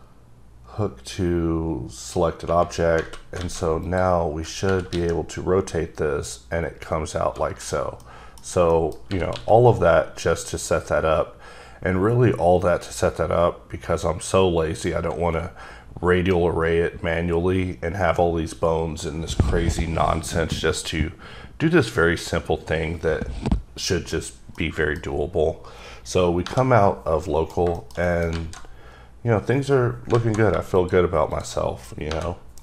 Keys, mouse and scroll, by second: 2.6-3.0 scroll down 2, 3.4 a, 3.8 click, 4.7 r, 4.9 x, 7.6 right click, 8.0 middle click, 8.3-8.6 scroll down 3, 8.7 middle click, 9.1 r, 9.3 x, 24.1 right click, 24.5 middle click, 25.1-26.4 scroll down 2, 27.2 middle click, 27.7 double middle click, 28.0 middle click, 28.3 alt+z, 28.6-30.0 scroll up 2, 30.1 alt+z, 30.7 shift+click, 31.3 shift+double click.